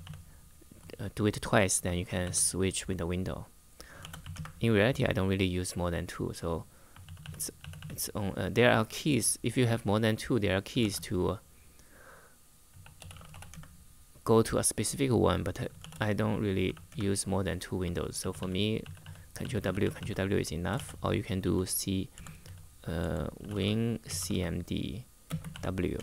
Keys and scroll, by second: 1.7 ctrl+w, 3.5-4.5 typing, 6.8 ctrl+w, 6.9 ctrl+w, 7.3 ctrl+w, 7.5 ctrl+w, 10.5 shift+;, 12.2-13.5 typing, 15.5-16.9 typing, 17.9 ctrl+w, 18.1 ctrl+w, 18.5 ctrl+w, 18.7 ctrl+w, 19.1 ctrl+w, 20.5-26.0 typing.